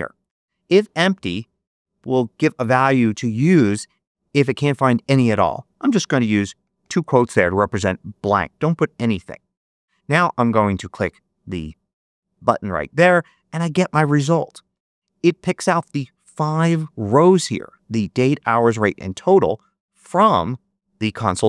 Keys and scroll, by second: 6.5 shift+'.